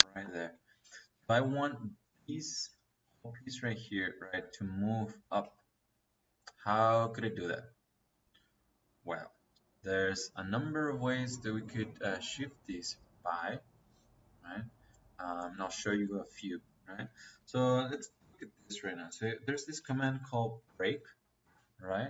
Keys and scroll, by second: 16.7 Escape, 19.3-21.3 typing.